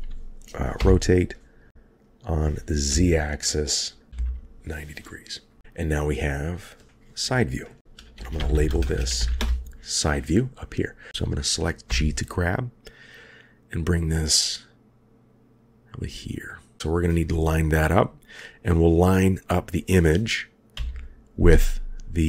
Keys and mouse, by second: 0.8 r, 4.1 r, 6.3 click, 6.5-9.4 drag, 11.9 g, 19.7 click, 20.7 g.